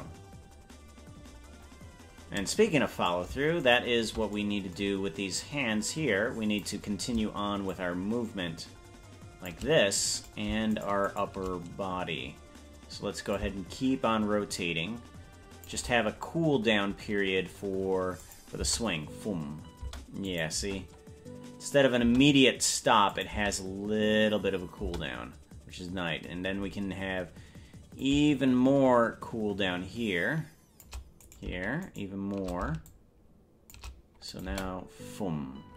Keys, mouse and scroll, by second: 2.2 ctrl+s, 3.2 right click, 3.8 shift+right click, 5.5-6.8 drag, 7.8-9.6 shift+drag, 10.5 right click, 11.1 shift+right click, 11.3 shift+right click, 13.4-15.8 shift+drag, 18.4 click, 18.7 space, 20.1 space, 20.5-22.4 drag, 20.7 space, 22.3 space, 23.3 click, 23.5 space, 25.1 space, 28.1-31.0 shift+drag, 31.5 right click, 32.1 shift+right click, 32.9 shift+click, 34.5 click, 34.9 space.